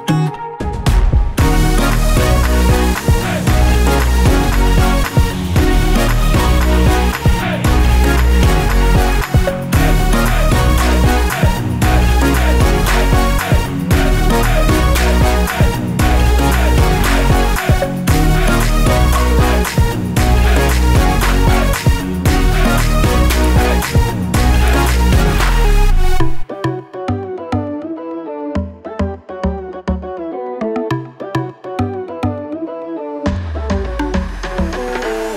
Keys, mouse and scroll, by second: 0.0 click, 0.3 click, 2.0-2.7 scroll up 1, 4.9 click, 8.7 click, 10.7 click, 11.7 click, 14.4 click, 15.0 scroll up 1, 16.2 ctrl+click, 17.7 ctrl+click, 18.7 scroll down 1, 19.1 scroll up 1, 19.7 click, 20.4 ctrl+click, 21.8 click, 22.8 ctrl+click, 25.8 click, 26.6 scroll down 1, 26.9 scroll up 1, 28.4 ctrl+click, 30.1 right click, 30.9 scroll down 1, 31.4 click.